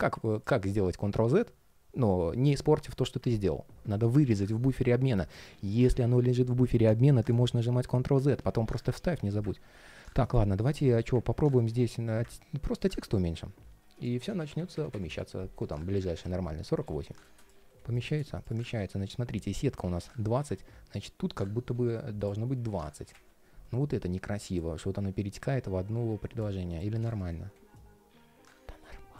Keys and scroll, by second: 10.3 ctrl+shift+4, 17.3 ctrl+shift+4, 18.7 ctrl+shift+4, 26.2 super+z, 26.6 ctrl+shift+4.